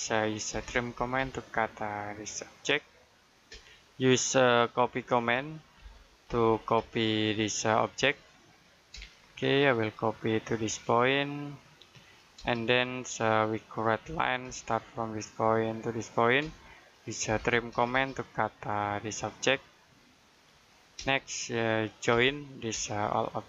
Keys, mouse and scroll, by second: 0.4-0.8 typing, 1.6 click, 3.4 space, 4.1 middle click, 4.6-5.3 scroll up 1, 5.3 middle click, 5.7 c, 6.6 space, 6.9-7.2 scroll up 1, 7.4 click, 8.8 space, 9.1-9.7 scroll down 1, 9.7 click, 10.1 middle click, 11.4 click, 12.3 space, 12.8-13.9 scroll up 1, 13.9-14.3 typing, 15.2 click, 16.3-17.6 typing, 18.1 click, 20.9 space, 22.0 j, 22.6 space.